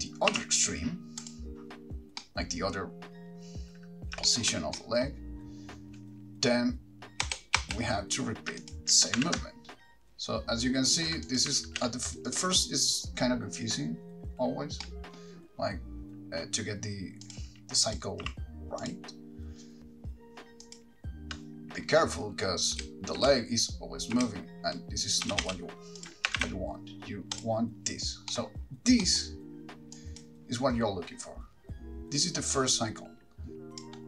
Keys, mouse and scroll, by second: 1.5 r, 2.4 middle click, 4.5 shift+middle click, 4.9 middle click, 7.4 Right, 7.8 Right, 8.9 shift+click, 9.4 g, 11.2 ctrl+click, 11.6 click, 11.8 alt+g, 12.6 ctrl+click, 15.0 middle click, 17.4 click, 18.0 click, 19.1 r, 19.8 click, 19.8 shift+middle click, 20.8 click, 22.9 Right, 24.3 Right, 25.4 Left, 25.6 Left, 26.2 click, 26.6 shift+d, 27.6 click, 30.1 click, 30.1 middle click, 30.1-31.3 scroll up 7, 32.4 click.